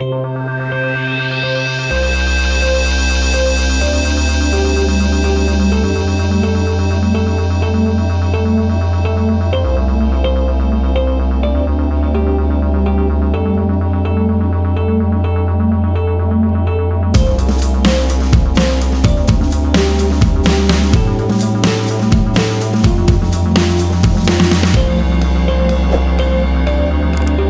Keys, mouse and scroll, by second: 0.3 ctrl+r, 1.1 ctrl+click, 1.9 ctrl+r, 2.2 click, 3.3 ctrl+click, 4.4 scroll down 1, 5.0-5.4 scroll up 1, 6.9-7.4 scroll down 1, 8.9 click, 10.8 click, 13.2 click, 14.1 click, 15.2 F4, 16.8 F9, 18.4 click, 19.8 ctrl+click, 20.7 click, 21.0 double click, 21.7 click, 22.0 double click, 22.9 ctrl+click, 24.1 click, 24.5 ctrl+click, 25.4 ctrl+r, 26.1 click, 26.2 scroll down 1, 26.6-26.9 scroll up 1, 27.1 ctrl+click.